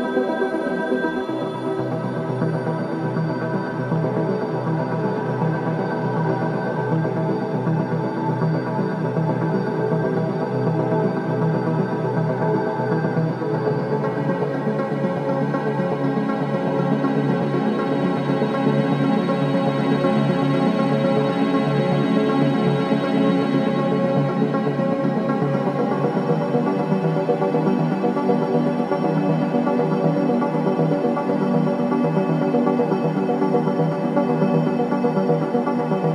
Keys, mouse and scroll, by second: 2.7 alt+click, 7.0 alt+click, 9.5 alt+right click, 9.8 alt+middle click, 10.1 alt+right click, 10.7-12.7 drag, 12.7 space, 14.1 alt+middle click, 16.0-16.8 scroll down 1, 17.1 scroll up 1, 17.7 alt+middle click, 18.7 alt+middle click, 19.5-21.0 drag, 21.4 shift+right click, 23.2 r, 23.9 click, 25.1 click, 27.4 w, 27.9-32.6 drag, 32.9 alt+right click, 33.4 click, 33.9 alt+click, 34.3 alt+right click, 34.6 alt+middle click, 35.3 alt+click.